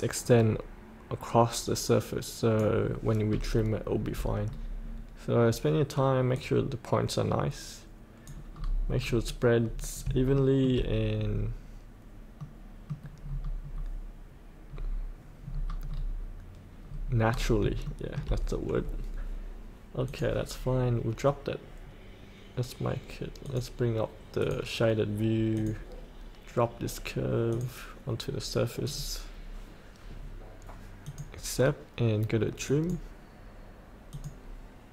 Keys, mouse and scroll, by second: 3.2 scroll up 1, 4.0 scroll down 1, 6.3-8.6 drag, 8.6 scroll up 1, 10.4 shift+middle click, 11.2-12.4 scroll up 1, 12.4 middle click, 13.2-13.9 scroll down 1, 14.6-15.5 scroll up 1, 15.5 scroll down 1, 16.9 scroll up 1, 17.8 shift+middle click, 20.0-25.5 drag.